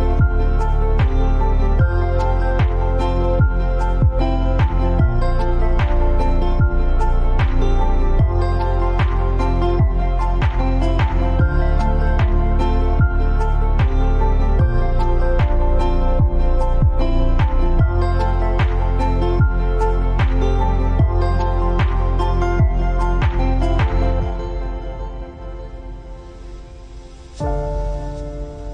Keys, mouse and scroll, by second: 0.3 space, 0.7 space, 1.1 space, 2.5-5.0 alt+scroll up 2, 6.3 click, 7.1-10.8 alt+drag, 10.8 t, 11.2-16.3 drag, 16.3 space, 16.6 click, 16.8 space, 18.1 click, 18.6 ctrl+a.